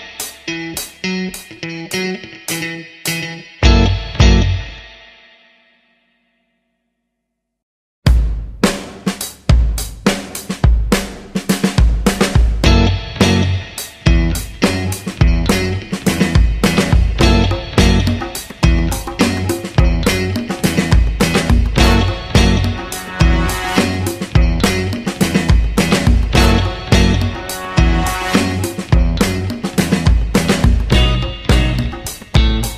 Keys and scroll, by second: 8.0 space.